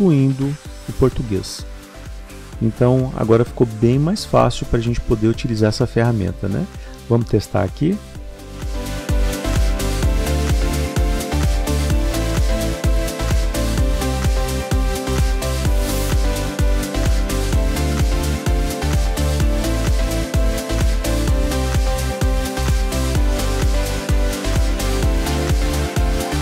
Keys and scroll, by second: 6.0 ctrl++.